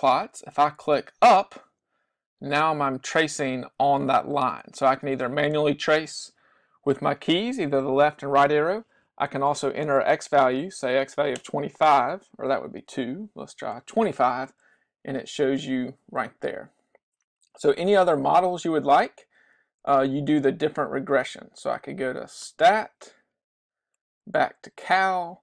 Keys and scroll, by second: 1.1 Up, 2.3 Left, 2.5 Left, 2.7 Left, 2.9 Left, 3.1 Left, 3.4 Left, 3.5 Left, 3.7 Left, 3.9 Left, 4.1 Left, 4.3 Left, 4.5 Left, 4.7 Left, 4.9 Left, 5.1 Left, 5.4 Left, 5.7 Left, 6.9 Right, 7.2 Right, 7.5 Right, 7.8 Right, 11.2 2, 11.4 Return, 13.0 2, 13.4 5, 13.8 Return, 23.9 Right.